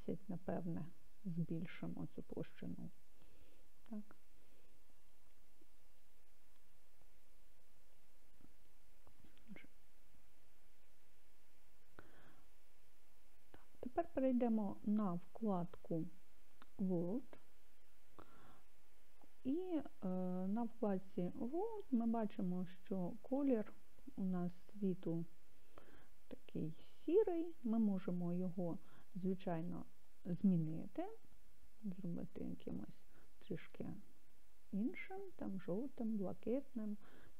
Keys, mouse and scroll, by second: 0.3 0, 7.9-9.9 drag, 17.1 click, 22.5 click, 29.0 click.